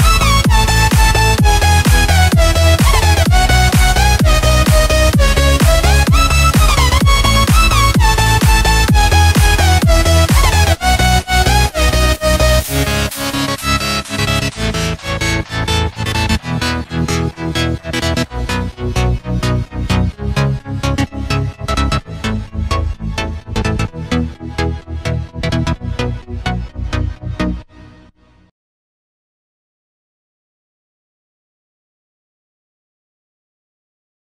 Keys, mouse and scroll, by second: 0.0-2.2 typing, 3.2 click, 5.6-7.8 typing, 8.3 click, 9.5-13.1 typing, 14.2 click, 23.9 Return, 24.7 click, 29.6-30.3 typing, 31.5 i, 33.7 Escape.